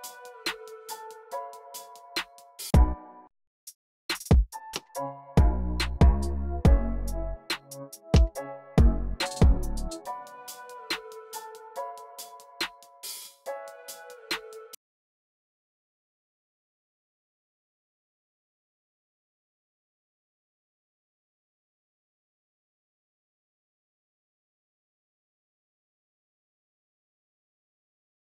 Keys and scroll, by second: 0.0-2.1 typing, 4.0 c, 11.1 super+a, 11.8 u.